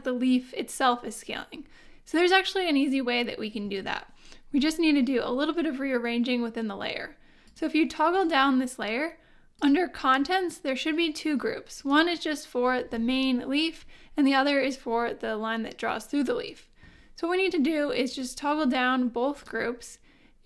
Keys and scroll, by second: 3.6 super+z.